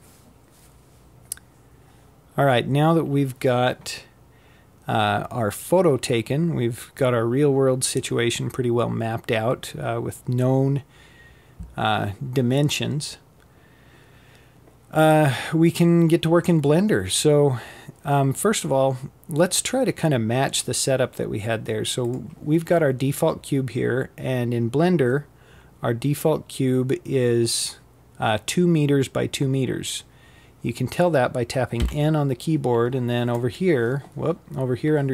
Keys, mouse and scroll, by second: 19.7 click, 29.5 n, 31.0-34.0 right drag.